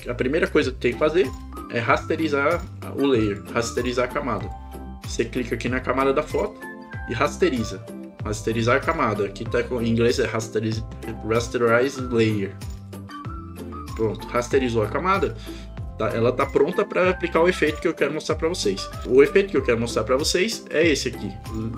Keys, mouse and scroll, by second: 1.3 right click, 3.3 click, 4.4 click, 12.8 click, 20.6 click.